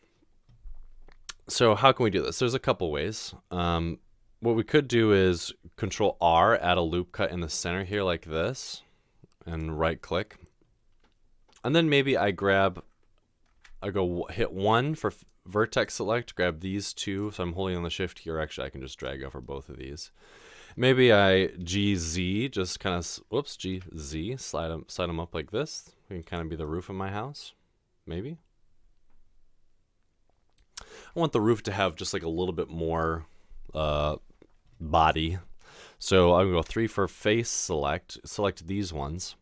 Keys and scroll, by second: 5.9 ctrl+r, 21.7 g, 23.7 typing, 36.7 3.